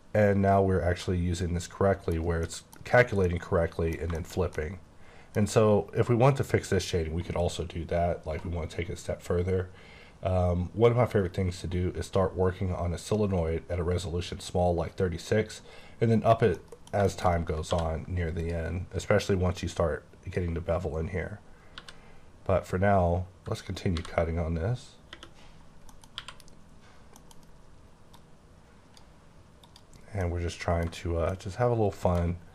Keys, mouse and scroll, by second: 2.4 scroll down 1, 2.8-3.2 scroll up 1, 3.2 middle click, 3.9 scroll down 1, 4.1 shift+middle click, 7.9-8.6 scroll down 3, 8.6-10.0 scroll down 5, 10.3-12.2 scroll up 2, 16.6 middle click, 17.3 scroll up 2, 17.7 d, 18.4 click, 19.2 click, 21.7 g, 23.9 b, 25.1 space, 25.6 scroll down 2, 25.9 middle click, 26.2 q, 27.2 middle click, 27.4 scroll up 3, 28.1 click, 29.6 click, 29.9 scroll down 4, 30.2 middle click, 31.0 scroll up 1, 31.3 middle click, 32.3-32.5 scroll up 5.